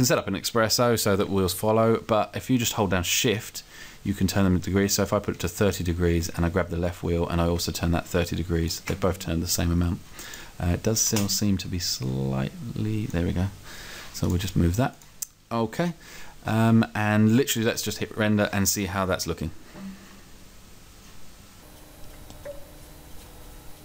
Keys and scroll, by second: 11.2 space.